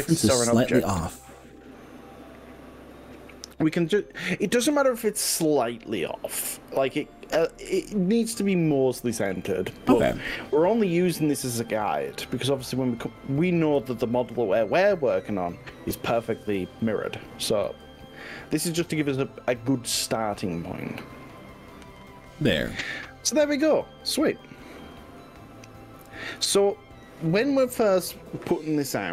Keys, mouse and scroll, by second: 4.1 click, 11.2 click, 13.9 g, 17.7 x, 21.5 click, 22.1-23.7 middle drag, 23.9-29.1 middle drag.